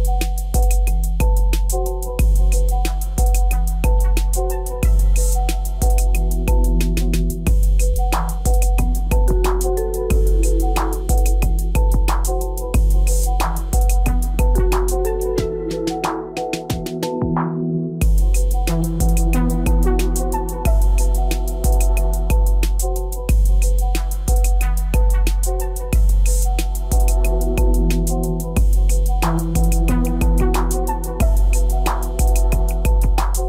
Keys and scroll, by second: 22.7 alt+c.